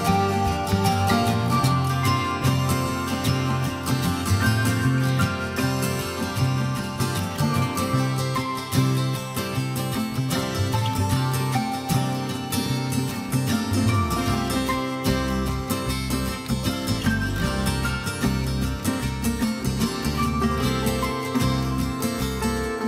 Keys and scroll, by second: 6.1 Return.